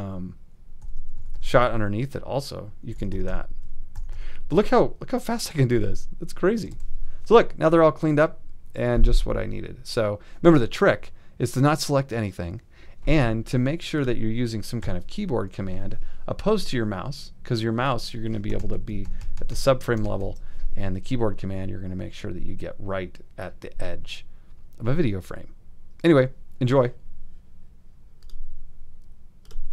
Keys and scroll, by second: 0.8 alt+], 1.2 alt+', 2.9 alt+], 3.9 alt+', 6.6 alt+shift+], 6.7 alt+shift+z, 7.6 shift+z, 14.8 ;, 18.6 super+=.